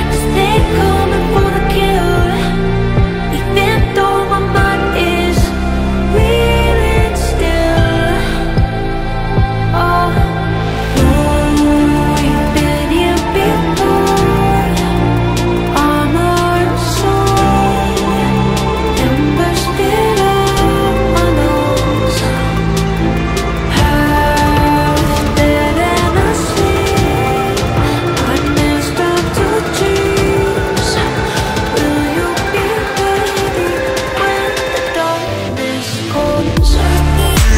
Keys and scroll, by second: 7.8 Escape, 9.3 Delete, 11.1 Delete, 13.1 Delete, 15.4 Delete, 19.3 F3, 24.4 Delete.